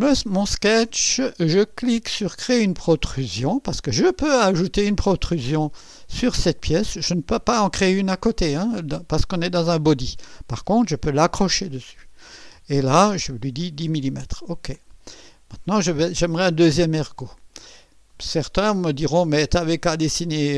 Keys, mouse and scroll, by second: 3.0 click, 14.7 click, 17.6 scroll down 1, 18.1 right click.